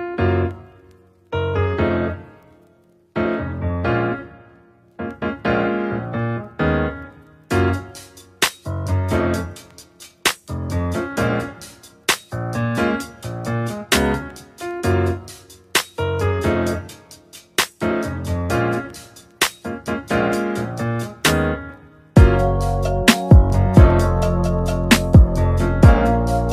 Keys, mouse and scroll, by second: 2.8-5.8 right drag, 6.3-8.5 drag, 8.5 r, 12.7 r, 17.0-20.6 drag, 20.6 r, 23.1 r, 24.6 i.